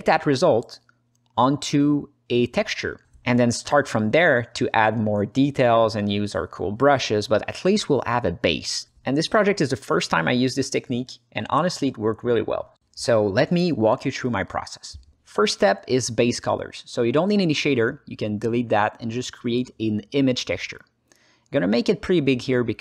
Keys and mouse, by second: 0.2-1.9 alt+middle drag, 2.3 alt+middle click, 3.1-4.3 alt+middle drag, 6.6 ctrl+space, 10.3 ctrl+space, 10.7 ctrl+alt+middle click, 11.3 alt+shift+middle click, 11.9 ctrl+alt+middle click, 12.4 alt+middle click, 13.3-14.5 alt+middle drag, 14.8 alt+shift+middle click, 16.5 click, 17.0 ctrl+alt+middle click, 17.5 click, 18.2 Delete, 19.0 shift+a, 21.8-22.8 drag.